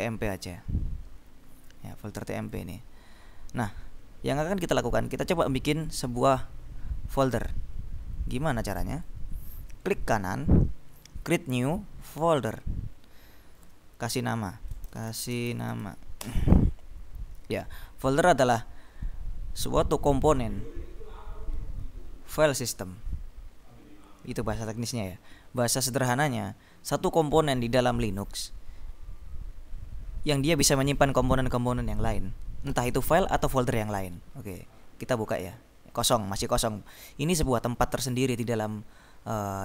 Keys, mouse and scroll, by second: 0.3 click, 1.8-2.4 scroll down 2, 2.6 click, 6.4-8.0 drag, 8.4-9.6 drag, 10.2 right click, 12.3 click, 12.9 scroll up 1, 14.7-16.4 typing, 35.3 click.